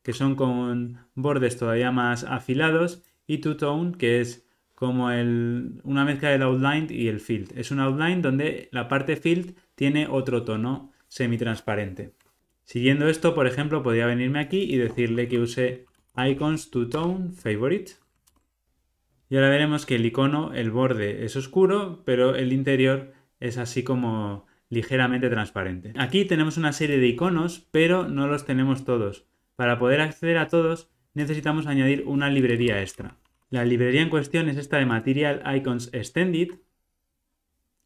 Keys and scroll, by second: 16.9 Return, 18.2 Return.